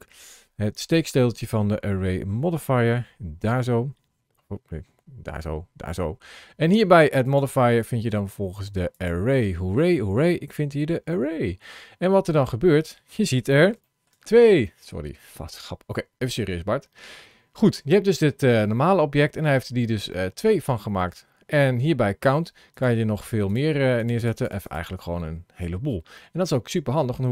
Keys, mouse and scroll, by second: 12.5 middle click, 13.6 shift+middle click, 14.5 middle click, 19.9 middle click, 22.5 click, 23.8 click, 24.0 click, 24.3 click, 24.5 click, 24.9-25.5 scroll down 4, 25.5-25.9 scroll up 4, 26.0 middle click.